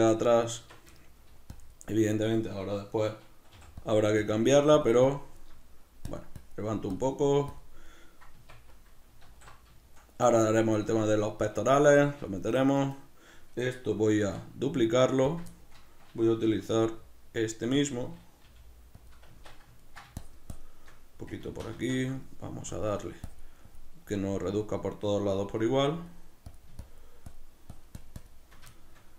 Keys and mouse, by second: 0.2 right click, 0.5 Tab, 0.7 b, 1.0 shift+middle click, 1.5 click, 2.2-3.8 middle drag, 3.8 click, 5.6 middle click, 6.0 click, 7.8-12.8 middle drag, 8.3 b, 9.3 alt+q, 12.8-14.2 right drag, 14.2 shift+d, 15.3 click, 15.5 shift+middle click, 16.5 r, 17.9 click, 18.5 g, 19.1 click, 19.3 Tab, 19.5 b, 19.8 ctrl+middle click, 20.2 shift+click, 21.5 ctrl+z, 22.7 click, 28.7 shift+middle click.